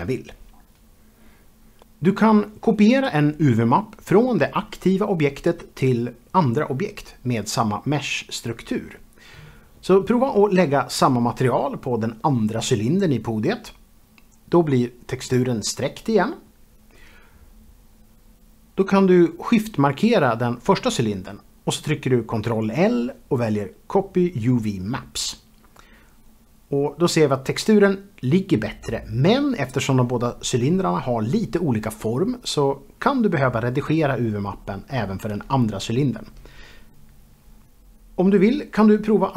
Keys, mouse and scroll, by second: 0.0 g, 0.7 middle click, 0.9-3.4 scroll down 1, 3.4 Tab, 6.4 KP_Divide, 11.1 click, 12.5 click, 13.3 Escape, 13.6 click, 13.9 click, 20.5 shift+click, 20.9 click, 21.9 ctrl+l, 25.1 click, 27.4 click, 29.2 KP_Divide, 29.6 Tab, 29.8 shift+middle click, 30.3 a, 30.4 click, 30.9 click, 31.1 s, 32.1 shift+click, 32.5 click, 32.7 shift+middle click, 33.1 click, 33.3 shift+middle click, 33.4-34.0 scroll up 3, 34.0 shift+middle click, 34.6 g, 34.9 x, 35.2 shift+click, 35.4 click, 35.6 middle click, 35.8 shift+middle click, 35.8 shift+double middle click, 35.9 middle click, 36.1 middle click, 36.4 scroll down 1, 36.5 KP_0, 36.8 Tab, 38.0 click, 38.3 shift+click, 38.3 shift+double click, 38.4 scroll down 1, 38.6 shift+click, 38.7 m, 39.0 click, 39.3 click.